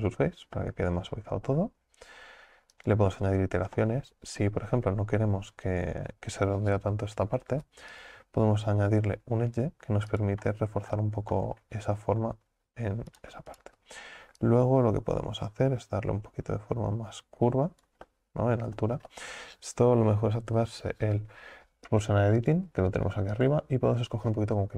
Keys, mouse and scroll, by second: 0.6-2.8 middle drag, 2.8-3.8 drag, 3.8-4.7 middle drag, 4.7 Tab, 11.1 scroll down 3, 11.4-13.1 middle drag, 13.1 right click, 13.5 alt+shift+right click, 14.4-17.5 drag, 18.1 middle click, 19.1 ctrl+z, 21.9 click, 22.4 click, 23.4-24.7 drag.